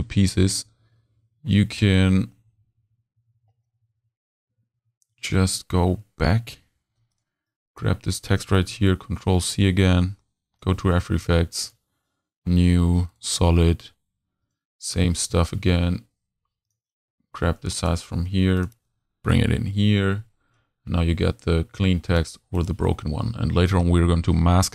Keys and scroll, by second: 8.6 super+c, 15.0 super+v, 17.3 super+c, 18.0 super+s, 18.9 super+s, 19.2 super+v.